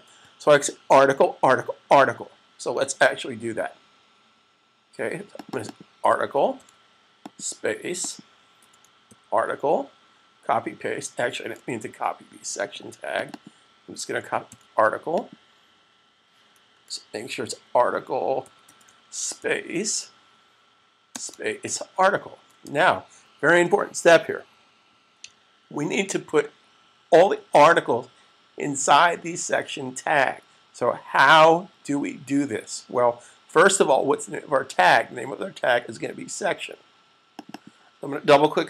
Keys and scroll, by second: 6.4 super+c, 9.0 super+v, 11.9 super+z, 14.5 super+c, 18.4 e, 19.1 super+v, 21.5 super+v, 22.4 super+s.